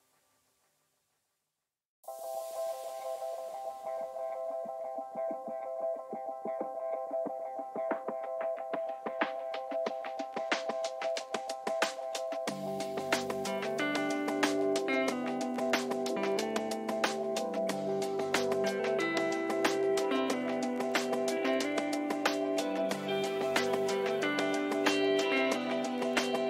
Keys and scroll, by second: 22.8 ctrl+-.